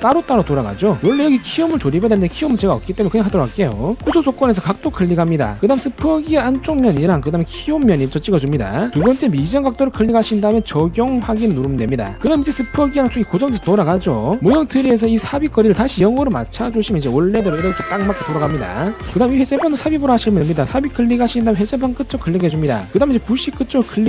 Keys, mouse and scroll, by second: 0.3-1.0 drag, 1.7-2.4 drag, 3.3 click, 5.2 click, 7.0 click, 8.7 click, 10.2 click, 10.9 click, 12.2-14.4 drag, 15.5 click, 21.7 click, 22.9 click.